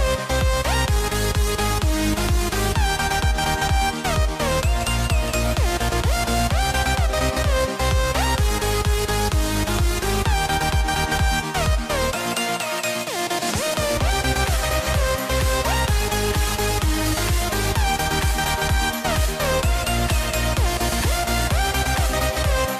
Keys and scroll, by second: 8.5 a, 11.7 a, 13.4 a, 15.6 a, 17.6 a, 19.4 a, 21.2 super+z.